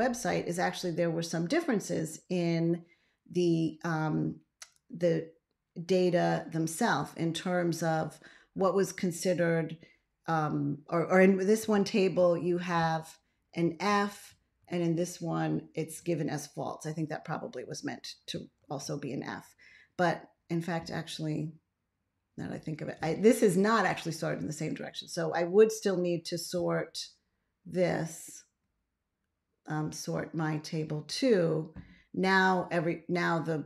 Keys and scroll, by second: 12.0 ctrl+a, 14.5 ctrl+a, 18.5 ctrl+x.